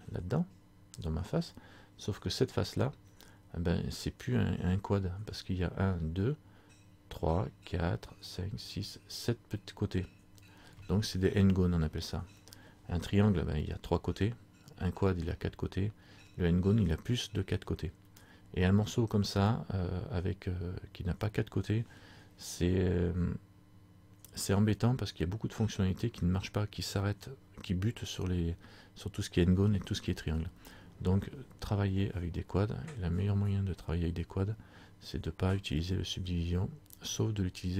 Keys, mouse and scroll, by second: 37.4-37.7 scroll down 3.